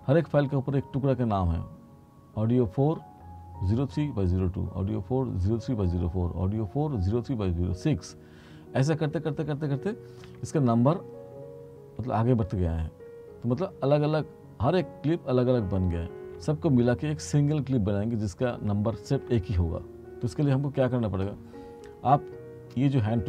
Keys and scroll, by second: 10.4 r.